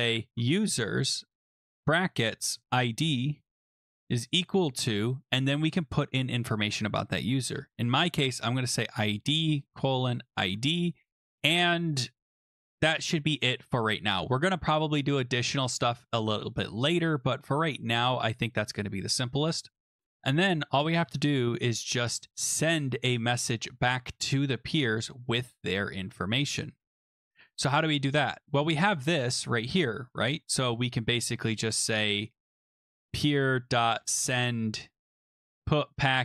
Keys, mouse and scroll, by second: 0.0-4.9 typing, 7.2-10.9 typing, 12.7 BackSpace, 14.8 click, 14.9 click, 14.9 click, 15.0-16.9 scroll, 16.9 scroll, 18.6 click, 19.1 scroll, 21.0 Return, 24.9 click, 24.9 click, 27.0-29.0 scroll down 4, 30.2 click, 30.6-31.4 scroll down 4, 31.4 click, 32.2 scroll, 32.5-35.8 typing.